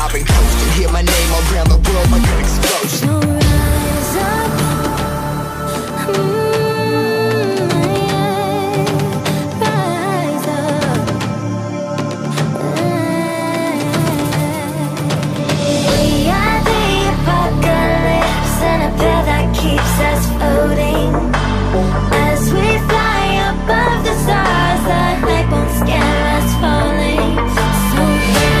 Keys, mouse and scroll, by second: 0.8 ctrl+v, 1.4 click, 1.7 ctrl+c, 2.0 click, 2.3 ctrl+v, 2.8 click, 4.5 click, 8.2 click, 8.6 ctrl+c, 9.0 ctrl+v, 9.3 click, 12.9 alt+scroll up 1, 13.2 scroll down 1, 13.3 click, 14.3 click, 14.7 Delete, 14.8 click, 15.6 click, 16.1 ctrl+c, 16.7 ctrl+v, 17.0 click, 17.2 Return, 17.9 click, 18.1 ctrl+t, 18.7 click, 19.4 Return, 20.2 click, 22.2 alt+Tab, 22.6 click, 22.8 ctrl+c, 23.2 v, 23.6 click, 26.0 alt+Tab, 26.3 alt+click, 26.8 Delete, 27.0 click, 27.6 KP_Add, 27.7-28.6 typing.